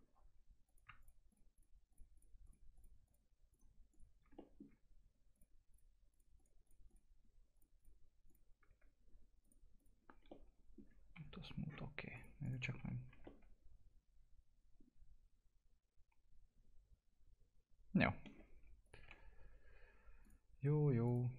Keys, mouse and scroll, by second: 0.7 click, 4.4 middle click, 5.3 ctrl+click, 9.4 click, 10.3 alt+middle click, 11.1 F4, 11.6-12.1 scroll down 1, 12.1 click, 12.6 scroll down 1, 12.8 F4, 13.2-18.5 alt+middle drag, 18.5 scroll up 1, 18.8 click, 19.0 F4, 20.2 click.